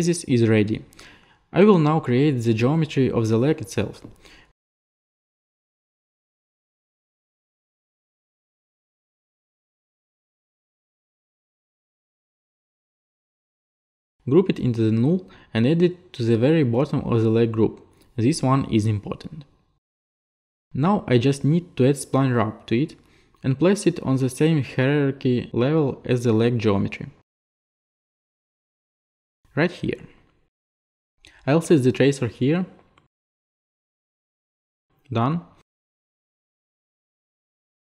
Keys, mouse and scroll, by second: 0.1 click, 0.8 middle click, 2.0 middle click, 4.3 click, 4.9 t, 6.8 click, 7.9 click, 8.2 click, 9.4 shift+click, 10.1 shift+middle click, 10.8 shift+click, 12.6 alt+click, 16.0 alt+g, 16.7 click, 16.7-17.6 typing, 16.7 click, 20.4 click, 22.6 click, 27.6 click, 29.9 click, 30.0 click, 30.7 click, 35.9 click.